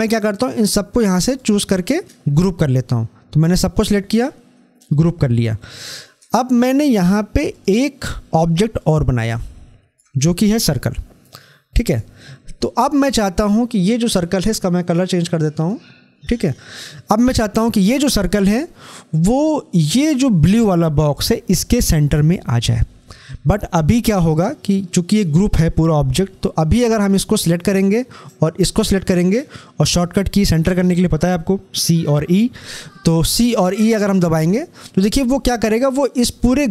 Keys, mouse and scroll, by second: 7.4-11.7 drag, 11.7 click, 15.3 click, 24.9 click, 25.0 click, 33.0 shift+click, 33.1 c.